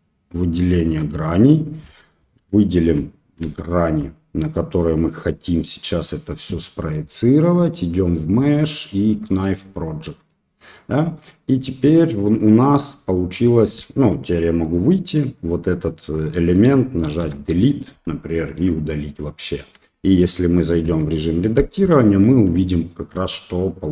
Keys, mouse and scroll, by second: 2.5 shift+click, 3.5 shift+click, 7.9-10.3 drag, 10.9 middle click, 11.2 middle click, 13.9 Tab, 14.6 right click, 15.3 right click, 16.0 right click, 17.2 Delete, 19.2 right click, 19.7 Tab, 20.1 middle click, 20.8 KP_1, 22.7 shift+click.